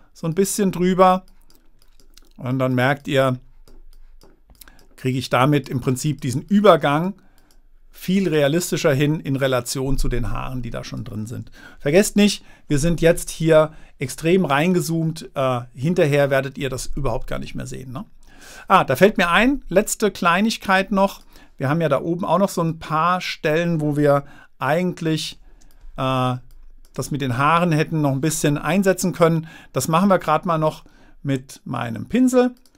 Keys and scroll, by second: 14.4 super+-, 22.9 space, 25.1 super++, 26.1 space.